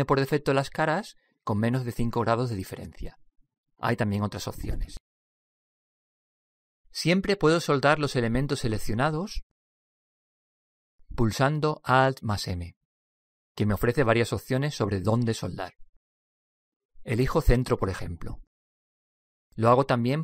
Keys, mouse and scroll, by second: 4.0-5.9 middle drag, 10.3 click, 11.1-13.8 right drag, 14.3 alt+m, 19.8-20.2 right drag.